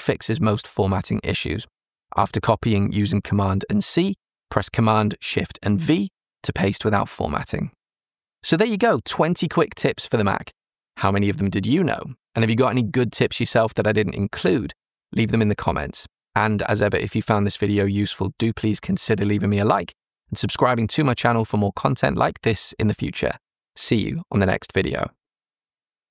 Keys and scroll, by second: 1.4 super+c, 5.0 alt+shift+super+v.